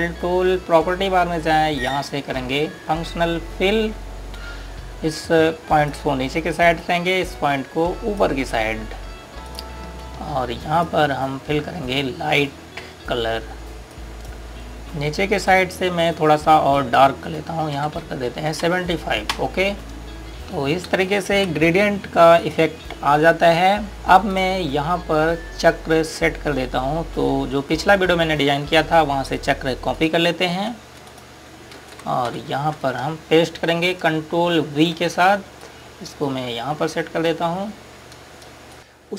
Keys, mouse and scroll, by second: 6.0 click, 14.9 click, 18.8 KP_7, 19.3 KP_5, 20.2 click, 22.2 space, 22.9 scroll down 1, 23.4 click, 23.9-24.3 scroll down 1, 24.3 click, 28.6 click, 32.1 click, 32.7 c, 33.3 Page_Down, 35.9 v, 36.6 click, 38.5 scroll up 1.